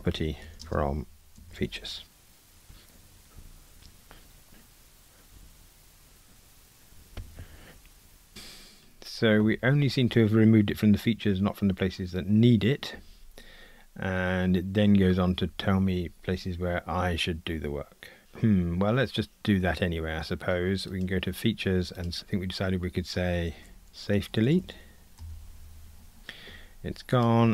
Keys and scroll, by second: 23.6 shift+super+a.